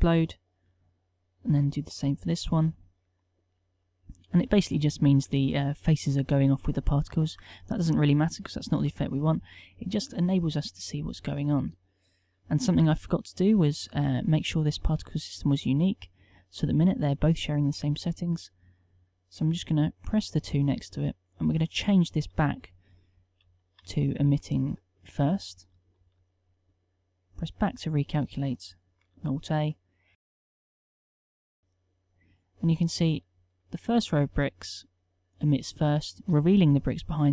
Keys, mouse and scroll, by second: 29.2 alt+a.